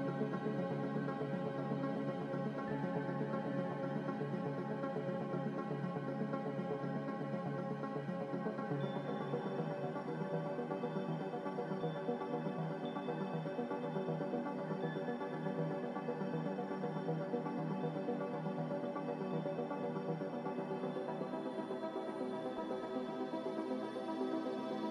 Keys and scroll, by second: 3.6-4.7 typing.